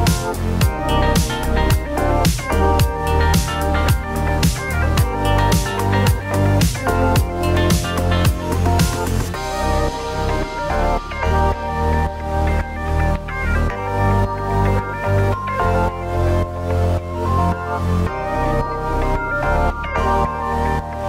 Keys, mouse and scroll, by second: 0.4 click, 0.4-1.9 typing, 2.0 click, 3.9 click, 4.4 g, 4.7 z, 7.1 click, 7.8 click, 8.3 l, 9.6 ctrl+v, 11.5 middle click, 12.8 click, 14.0 g, 14.4 z, 17.8 click, 18.5 click, 19.0 g, 19.3 z.